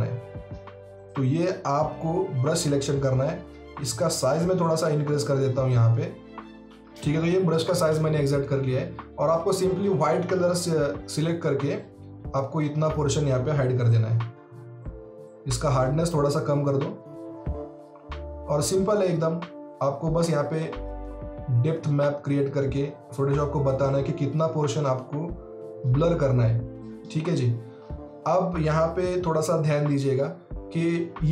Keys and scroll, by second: 6.4 [.